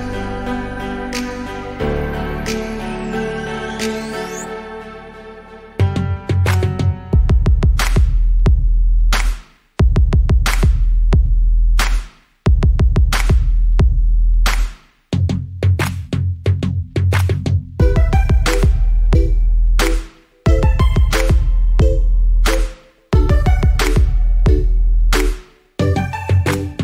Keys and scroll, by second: 2.0 ctrl+g, 4.3 Return, 20.9 ctrl+t.